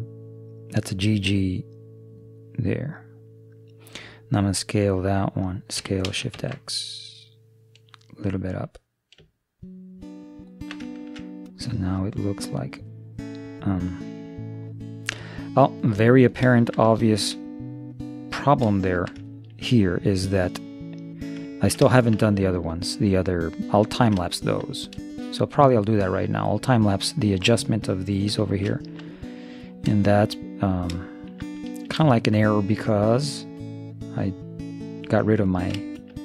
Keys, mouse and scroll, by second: 2.9 middle click, 5.8 s, 10.9-13.2 middle drag, 16.3-21.0 middle drag, 21.6-26.8 middle drag, 28.5-31.2 middle drag, 32.1-34.4 middle drag, 35.5-36.2 middle drag.